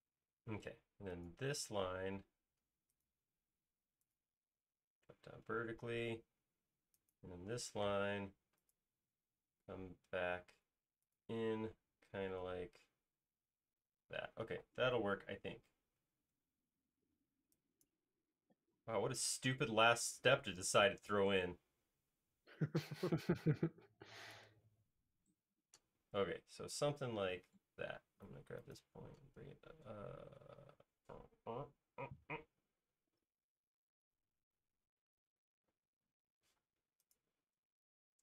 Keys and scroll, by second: 1.9 m, 7.2 space, 7.8 m, 11.8 space, 14.2 e, 16.1 space, 16.8 e, 24.8 space, 27.5 m, 35.9-37.1 typing.